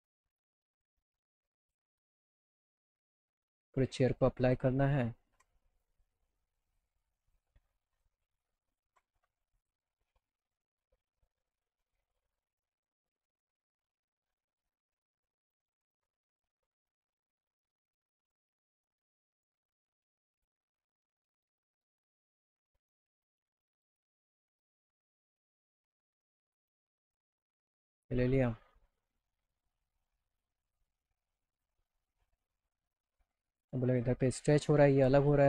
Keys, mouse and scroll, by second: 0.8 click, 1.7 super+click, 2.7 click, 3.2 click, 3.7 click, 5.4 ctrl+alt+click, 6.6 alt+click, 7.2 alt+click, 7.9 alt+click, 8.7 alt+click, 9.6 click, 13.3 click, 20.0 click, 20.3 click, 21.6 click, 21.7 click, 24.9 click, 26.2 click, 26.6 click, 27.4 click, 27.6 click, 30.6 click, 31.5 click, 32.2 click, 34.9 click.